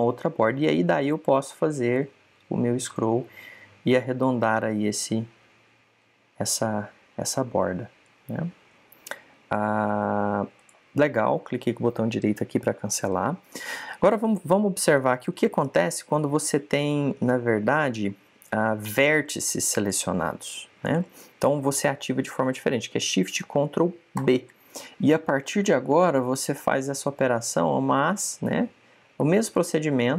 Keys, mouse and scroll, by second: 11.5 right click, 15.9 click, 17.7 right click, 20.7 right click, 25.1 ctrl+shift+b.